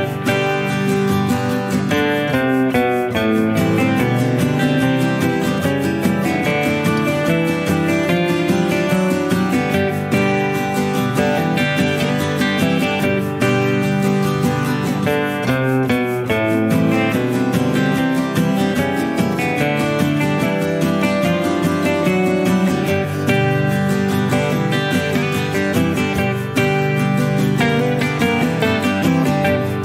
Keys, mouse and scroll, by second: 0.0 click, 1.2 shift+click, 2.3 shift+click, 3.4 shift+click, 4.6 shift+click, 5.4 shift+click, 6.5 shift+click, 7.8 click, 10.8 click, 12.5-17.0 drag, 18.1 click, 20.2-20.9 scroll down 2, 21.1 -, 21.8 click, 22.4 -, 22.6-24.0 drag, 24.6 click, 28.4 click.